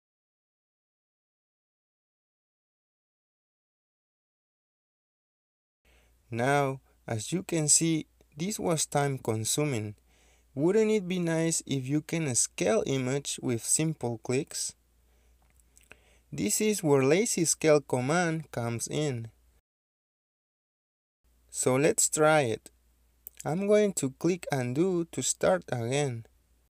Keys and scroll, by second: 1.9-2.5 typing, 4.7 Escape, 9.9 l, 10.0 space, 11.7 Escape, 11.9 space, 13.3 Escape, 13.8 Return, 13.8-14.9 typing, 15.3 Return, 17.7 Escape.